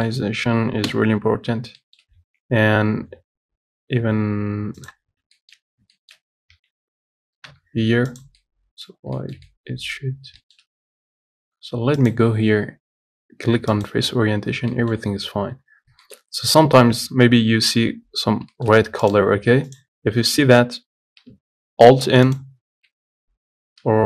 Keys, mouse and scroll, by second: 0.1-1.1 shift+middle drag, 1.1 KP_7, 1.7-2.1 scroll down 2, 2.1 shift+middle click, 2.4 shift+d, 5.3 scroll up 1, 5.6 shift+middle click, 5.9 scroll up 4, 6.2-7.7 shift+middle drag, 7.7 g, 8.6-10.2 middle drag, 10.2-10.6 scroll down 2, 10.6 shift+middle click, 10.9-11.4 scroll up 1, 11.4-12.2 scroll up 1, 12.2-13.9 scroll up 1, 13.9 click, 14.5-14.9 scroll down 10, 14.9 middle click, 15.2 scroll up 5, 16.2-18.5 shift+middle drag, 18.5 scroll up 1, 18.8 shift+middle click, 19.3 click, 20.0 click, 20.5 Tab, 20.7 a, 22.6 alt+n, 22.9 scroll down 1, 23.5 Tab.